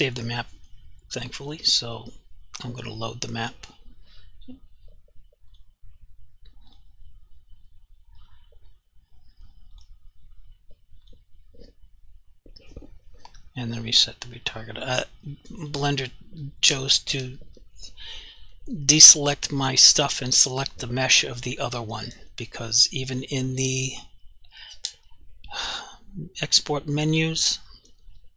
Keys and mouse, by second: 9.8 click, 14.5 click, 23.2 click.